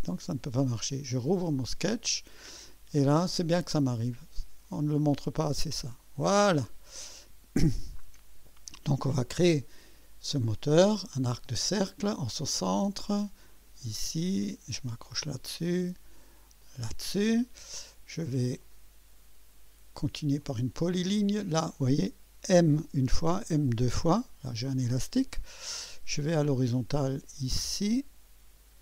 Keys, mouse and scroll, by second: 1.1 click, 3.8 click, 5.6 click, 7.1 right click, 11.3 click, 13.5 click, 15.0 click, 16.6 click, 18.6 click, 20.4 click, 22.4 m, 23.3 m.